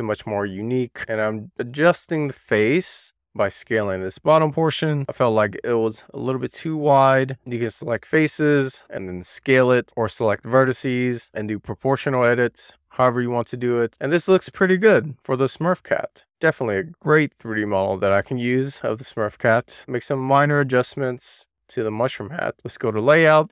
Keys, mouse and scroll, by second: 0.9 scroll down 1, 1.0 a, 1.1 middle click, 1.4 click, 1.6 1, 2.0 shift+click, 2.3 super+z, 2.5 scroll down 1, 2.7 super+z, 2.9 scroll up 7, 3.4 click, 4.5 click, 4.7 middle click, 4.8 scroll down 1, 5.0 shift+middle click, 5.6 click, 5.8 shift+click, 5.9 r, 6.1 middle click, 6.4 super+click, 6.6 middle click, 6.9 click, 7.0 middle click, 7.2-7.5 scroll down 2, 7.7 middle click, 7.9 middle click, 8.0 scroll up 2, 8.1 ctrl+click, 8.6 middle click, 8.8 scroll down 2, 9.0 click, 9.5 shift+middle click, 9.9 click, 10.0 middle click, 10.1 click, 10.4 scroll down 1, 10.6-10.9 click, 11.1 middle click, 11.9 click, 12.0 shift+click, 12.2 r, 12.3 click, 12.3 middle click, 12.8 click, 13.0 middle click, 13.2 click, 13.4 scroll up 3, 13.7 scroll down 2, 13.8 middle click, 14.2 middle drag, 14.9 middle click, 15.4 scroll down 1, 15.5-15.9 shift+middle drag, 16.0 scroll up 2, 16.2 shift+middle click, 17.2-17.8 middle drag, 17.8 scroll down 2, 17.9 middle click, 18.2-18.8 scroll up 4, 18.8 scroll down 2, 18.9-19.4 middle drag, 19.6 shift+middle click, 20.4-21.0 scroll up 1, 21.1 click, 21.9 click, 22.6 click.